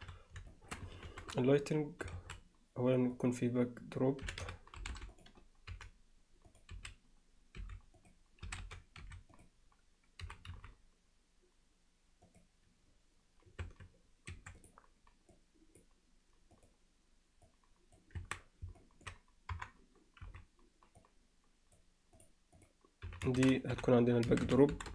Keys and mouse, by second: 0.5 alt+shift+middle click, 1.1 shift+c, 2.2 shift+a, 4.3 r, 5.7 g, 6.8 s, 8.5 s, 10.2 g, 13.7 Tab, 14.3 2, 15.3 click, 16.6 click, 17.5 click, 18.2 Tab, 18.8 middle drag, 19.5 KP_3, 20.2 z, 21.1 click, 22.6-24.9 drag.